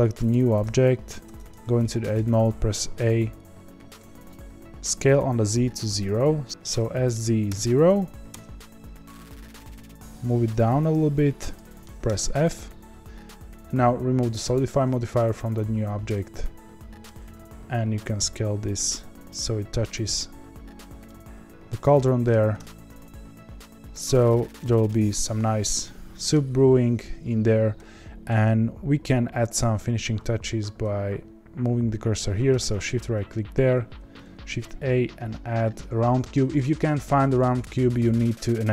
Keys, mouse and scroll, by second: 0.3 click, 1.2 Tab, 1.8 middle click, 2.1 a, 6.5 ctrl+z, 6.8 s, 10.1 g, 11.6 middle click, 12.0 f, 14.5 click, 16.1-17.5 middle drag, 17.5 s, 21.0-22.5 middle drag, 22.5 Tab, 24.1 click, 24.6-32.7 middle drag, 32.7-38.7 shift+right drag.